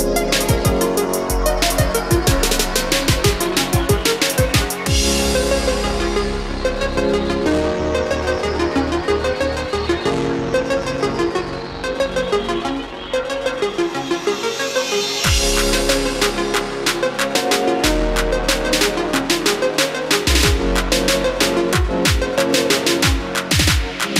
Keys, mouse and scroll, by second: 10.8-12.0 scroll up 1, 12.0 click, 12.3-12.8 scroll down 1, 12.8-13.3 scroll up 1, 14.1 click, 15.0-19.1 ctrl+drag, 19.1-20.6 middle drag, 22.2 click, 22.6 middle click, 23.9 ctrl+click.